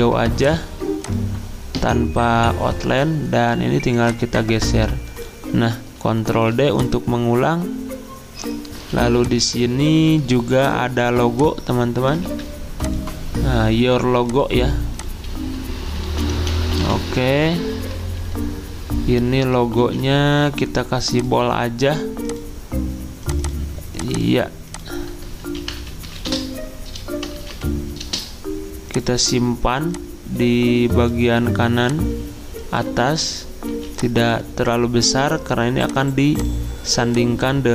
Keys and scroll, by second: 6.3 ctrl+d, 8.9 z, 12.2 ctrl+z, 15.9-17.3 typing, 18.1 ctrl+a, 18.3 ctrl+q, 19.8 ctrl+z, 25.4-28.0 typing, 33.7 z.